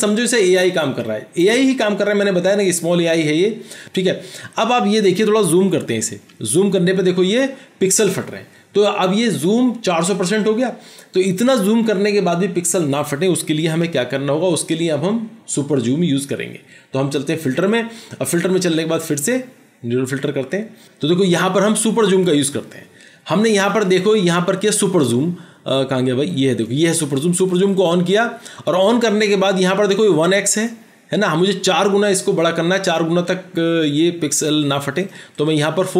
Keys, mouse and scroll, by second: 5.8 ctrl+=, 6.4 ctrl+=, 13.9 ctrl+0, 35.4 double click.